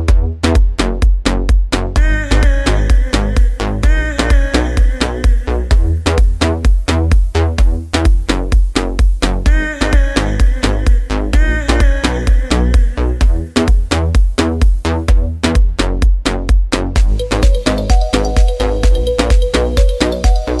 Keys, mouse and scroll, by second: 9.6-13.6 drag.